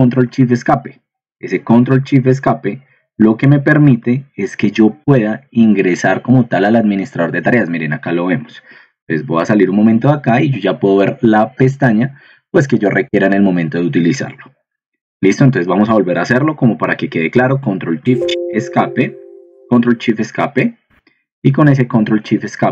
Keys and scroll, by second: 18.1 Escape, 20.0 ctrl+shift+Escape.